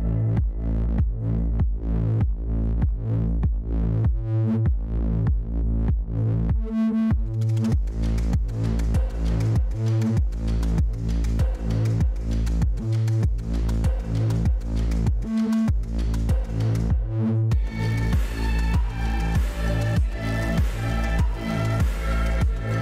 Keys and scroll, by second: 0.0-0.5 typing, 20.4 k, 20.5 F11, 21.3 w, 22.4 w.